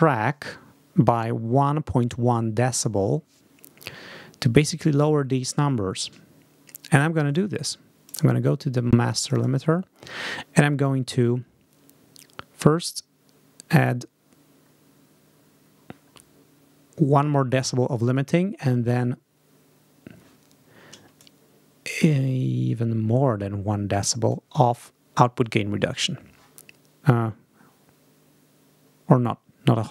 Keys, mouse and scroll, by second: 7.1 click, 7.9 click, 9.0 click, 10.5 click, 13.1 scroll down 2, 13.8 scroll down 2, 14.6-15.3 scroll down 4, 18.7 scroll down 2, 19.4 scroll down 2, 21.0-24.3 shift+drag.